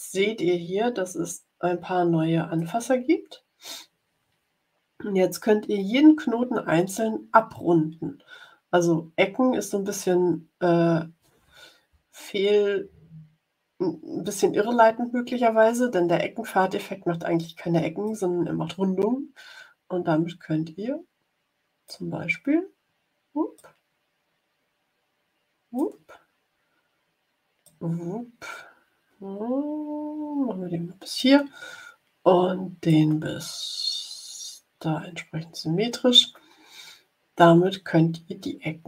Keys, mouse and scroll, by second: 0.9-1.9 ctrl+scroll up 4, 2.5-3.8 drag, 18.0-22.0 drag, 23.5-25.9 drag, 27.6-31.3 drag, 32.8-36.2 drag.